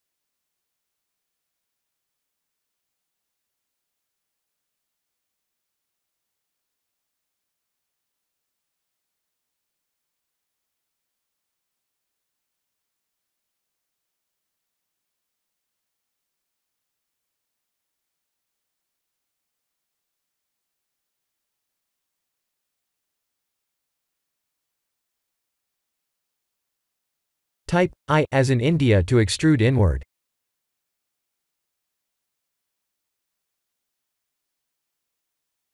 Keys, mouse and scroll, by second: 1.8-2.1 scroll up 4, 2.1 shift+z, 2.5 shift+middle click, 3.5 g, 6.0 Tab, 6.3 3, 6.5 click, 7.0-7.4 scroll down 5, 7.5 shift+middle click, 8.4 g, 10.6 e, 11.4 s, 13.7 e, 17.3 s, 18.8 click, 20.3 e, 21.4 s, 25.9 e, 26.1 s, 28.5 middle click, 30.7 i, 33.4 i, 34.4 click, 34.9 KP_1.